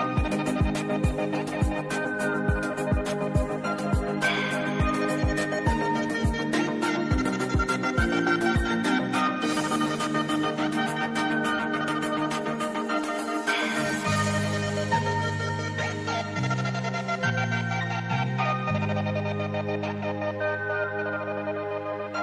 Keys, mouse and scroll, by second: 2.1 click, 3.4 click, 5.0 shift+t, 7.8-11.0 typing, 11.4 Return, 12.4-18.6 typing, 20.5-21.2 typing.